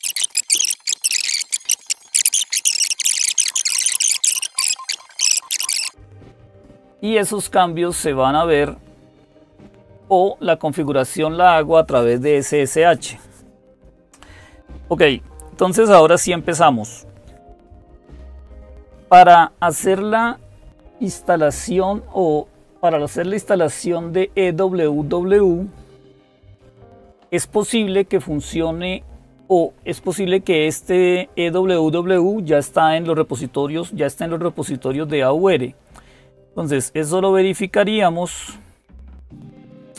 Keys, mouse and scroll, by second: 0.0 click, 0.3 super+Return, 0.6-1.9 typing, 3.0 click, 7.3 click, 9.6-11.4 drag, 22.6 click, 38.7-39.9 drag.